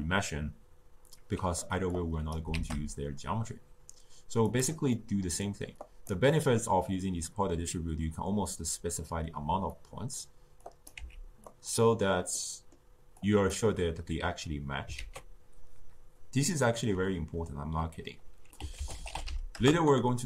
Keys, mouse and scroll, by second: 1.9 click, 2.5 shift+d, 4.9-5.8 middle drag, 5.8 click, 6.3-9.3 middle drag, 9.7-10.6 middle drag, 10.6 click, 10.9 x, 11.4 click, 12.3-13.2 middle drag, 13.2 click, 14.9 ctrl+a.